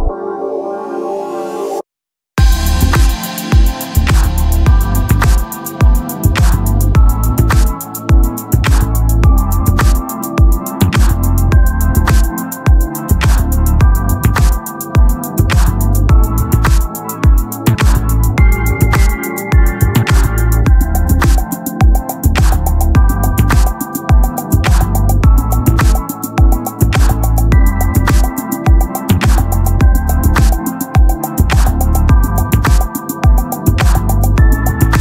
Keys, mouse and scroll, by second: 8.7-10.6 right drag, 10.6 ctrl+l, 16.5-19.6 drag, 16.5 t, 20.9-23.0 right drag, 23.0 ctrl+l, 26.2-28.2 right drag, 28.2 ctrl+l, 28.7 z, 30.9 right click, 30.9 z, 32.9 z, 33.3 z, 34.9 z.